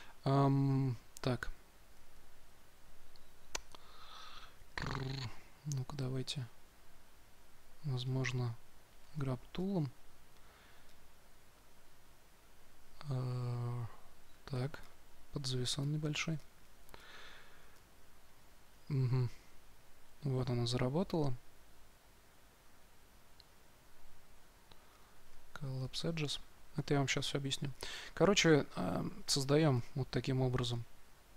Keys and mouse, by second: 1.3 ctrl+z, 1.9 ctrl+z, 5.0-6.9 drag, 9.0 g, 9.4-12.5 drag, 14.4 2, 14.7-31.3 drag.